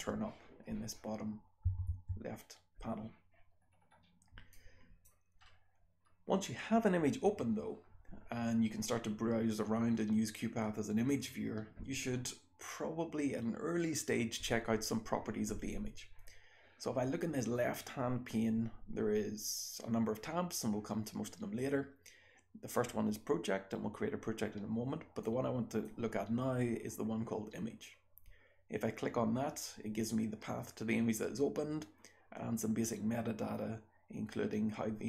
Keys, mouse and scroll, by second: 0.5-1.7 scroll down 1, 1.7 Right, 1.7-2.9 scroll down 1, 2.9-4.6 scroll down 1, 4.6-5.1 drag, 4.6-5.4 scroll down 1, 5.4-6.1 scroll up 2, 6.1-25.3 scroll down 2, 25.3 click.